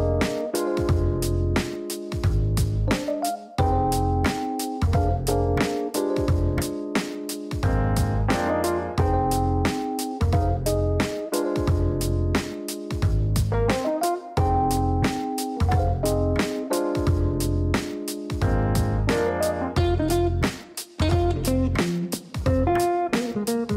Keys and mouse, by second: 2.3 click, 3.2 click, 3.3 click, 4.9 click, 6.6-9.3 typing, 10.2 click, 10.4 click, 10.5 click, 12.6 KP_2, 12.8 KP_0, 14.2 click, 18.2 click, 18.3 click, 19.3 click, 20.1-23.1 typing.